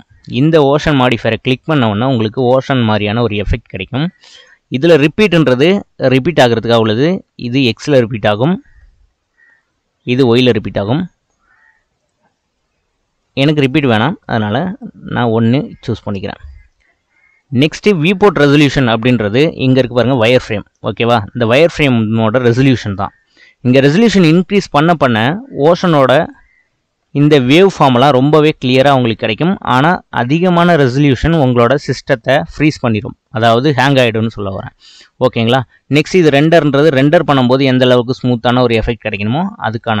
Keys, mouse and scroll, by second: 0.5 scroll down 3, 1.7-5.1 shift+middle drag, 7.5 click, 8.8-9.3 scroll down 4, 10.3-13.8 drag, 14.1 KP_1, 14.7-17.4 drag, 17.4-19.3 middle drag, 19.3 click, 20.1 shift+middle click, 20.4-20.8 scroll up 4, 21.1-22.8 shift+middle drag, 22.8-24.3 drag, 24.3-26.2 middle drag, 26.2 click, 27.2-31.2 middle drag, 31.2-32.2 drag, 32.2-36.3 shift+middle drag, 37.6-40.0 middle drag.